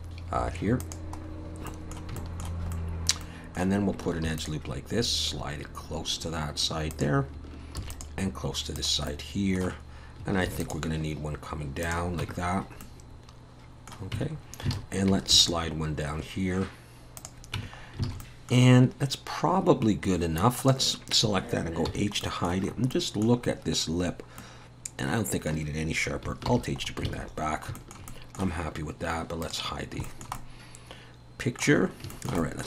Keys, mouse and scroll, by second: 1.2-2.1 scroll up 3, 1.7 middle click, 2.2 shift+middle click, 2.7 middle click, 3.2 middle click, 4.3 ctrl+r, 7.8 ctrl+r, 9.1 middle click, 10.5 ctrl+r, 12.2 Tab, 12.4-13.2 scroll down 3, 12.8 middle click, 14.2 Tab, 14.3-14.7 scroll up 2, 14.7 alt+a, 15.3 ctrl+r, 17.6 Tab, 17.8 scroll down 2, 18.1 alt+a, 18.2 middle click, 18.7-19.5 scroll up 2, 19.5 scroll down 1, 19.6-20.6 scroll down 3, 20.6 click, 21.9 h, 22.2 middle click, 22.7-24.1 scroll up 6, 22.9 middle click, 24.1-24.9 scroll down 2, 24.4 middle click, 26.5 alt+h, 26.8-27.6 scroll down 5, 27.1 alt+a, 27.8 shift+middle click, 28.1 middle click, 29.4 click, 30.1 shift+middle click, 30.4 middle click, 31.8 scroll up 3, 32.1 shift+middle click, 32.4 middle click.